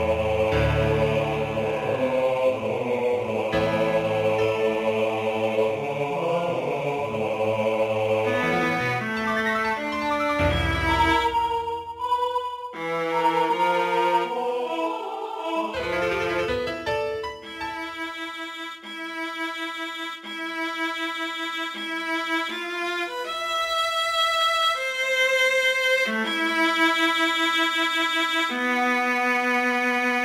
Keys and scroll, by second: 0.2 g, 1.0 g, 3.4 g, 4.1 g, 5.0 g, 11.7 g, 12.2 g, 14.0 Tab, 15.4 Tab, 17.5 ctrl+z, 18.4 g, 19.1 g, 19.6 g, 22.5 g, 23.4 g, 25.1 g, 26.4 g, 27.4 g, 28.6-30.2 typing.